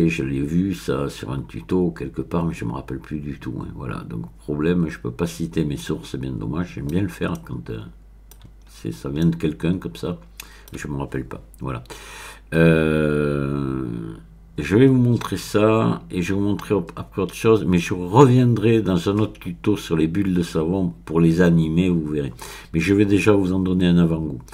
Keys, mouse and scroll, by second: 0.0-0.6 scroll up 1, 0.6-3.8 middle drag, 7.0-8.1 scroll down 2, 8.1 middle click, 8.7-9.2 scroll up 1, 9.2-10.8 middle drag.